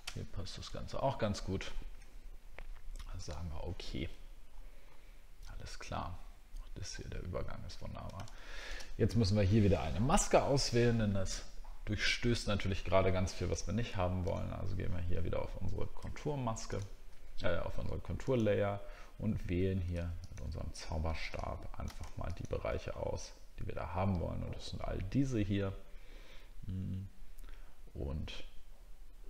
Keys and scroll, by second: 0.7 alt+scroll down 1, 1.4-1.9 alt+scroll down 2, 4.3 alt+scroll up 1, 4.8 alt+scroll up 1, 7.3 alt+scroll down 1, 7.5 alt+scroll up 1.